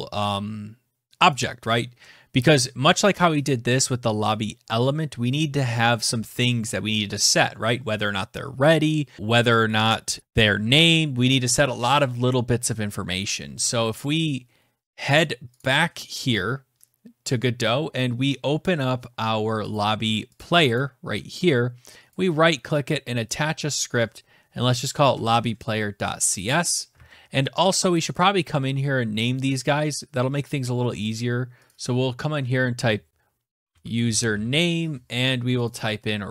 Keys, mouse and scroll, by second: 0.1 click, 1.0 scroll down 2, 3.0 click, 6.0 scroll, 7.0 click, 12.4 alt+Tab, 14.4 click, 18.5 click, 19.2 click, 19.6 click, 20.9 middle click, 22.1 middle click, 23.9 Return, 23.9 click, 25.7 alt+Tab, 26.6 click, 26.7 click, 28.4 middle click, 29.0 middle click, 29.0 middle click, 29.1 middle click, 29.3-30.0 scroll, 30.5 click, 30.6 click, 31.6-33.6 typing, 31.9 middle click, 34.4 click, 34.6 click, 34.9-36.1 typing.